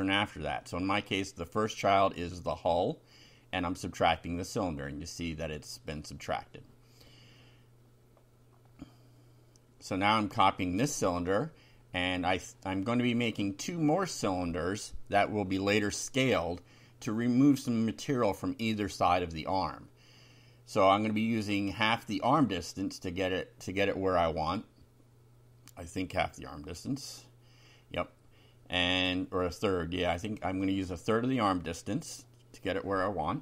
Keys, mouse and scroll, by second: 1.3 shift+Down, 1.7 shift+Tab, 2.1 shift+End, 2.6 shift+Return, 3.6 shift+], 4.9 F5, 6.9 ctrl+r, 8.5 click, 8.9 click, 10.2 ctrl+c, 10.6 ctrl+click, 11.6 Return, 12.3 ctrl+v, 20.3 click, 21.7 ctrl+c, 22.3 ctrl+click, 23.0 ctrl+v, 23.7 click, 25.5 ctrl+z, 26.2 click, 27.7 ctrl+v, 29.9 Right, 31.0 Delete.